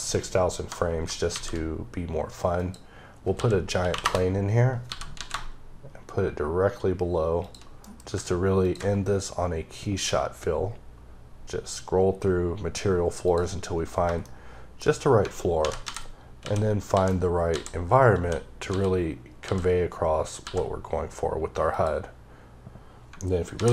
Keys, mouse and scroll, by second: 2.5 click, 3.3-5.2 typing, 3.9 KP_Enter, 7.3 click, 7.7 m, 8.5 ctrl+click, 9.0-10.4 scroll up 2, 10.4-11.3 scroll up 2, 11.3-12.9 scroll up 1, 13.2 click, 14.1 shift+middle click, 14.8-15.1 shift+scroll down 1, 15.5 alt+v, 21.6 click, 23.4 alt+v.